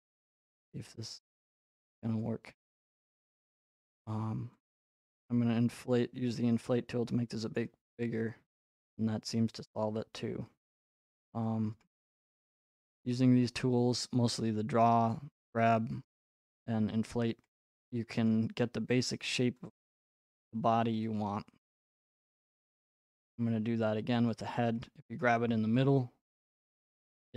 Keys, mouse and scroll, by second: 0.2 click, 1.6 click, 2.6 click, 4.7 click, 7.6 click, 10.9 right click, 11.8 right click, 13.6 click, 18.3 right click, 19.7 click, 20.2 middle click, 20.2 middle click, 24.3 click, 25.2 right click, 26.6 click.